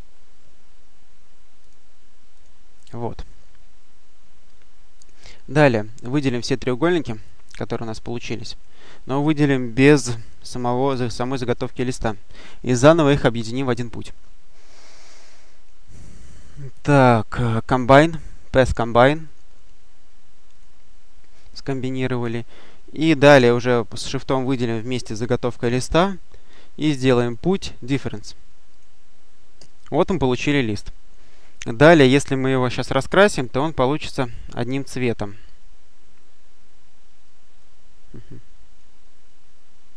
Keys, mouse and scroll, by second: 1.5 click, 2.2 click, 3.1-3.7 scroll down 2, 4.8 click, 5.8-6.3 scroll up 2, 7.1-8.9 drag, 10.9 shift+click, 13.3 click, 19.1 click, 20.4 click, 21.5 click, 24.5 shift+click, 27.1 click, 28.6 click, 29.5 click, 32.5-33.4 drag, 37.1 click.